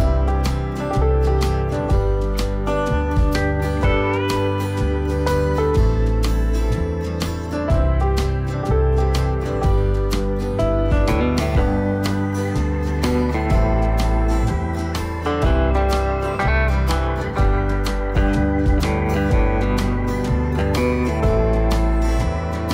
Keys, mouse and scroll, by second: 7.2 click, 8.2 click, 9.3 click, 10.5 click, 11.3 click, 12.1 click.